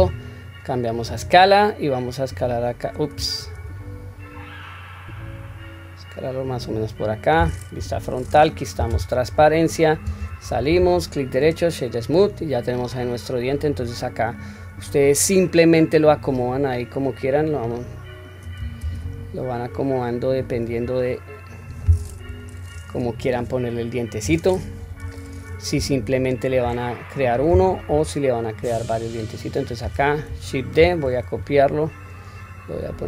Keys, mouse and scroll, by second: 1.0 click, 2.0 click, 3.4 ctrl+z, 4.3-6.6 drag, 7.8 KP_1, 8.7 q, 9.2-10.2 scroll down 1, 10.2 Tab, 10.2 scroll down 1, 11.0-12.3 right drag, 12.4 scroll up 2, 13.0-13.7 middle drag, 13.9-15.0 scroll down 2, 14.3-15.3 middle drag, 16.1 click, 17.3-18.5 drag, 18.8 ctrl+z, 19.7-20.7 drag, 21.0-22.0 middle drag, 22.2 KP_1, 22.7-24.0 scroll up 1, 24.8 KP_1, 25.9-26.7 shift+middle drag, 27.9 g, 30.8 shift+d.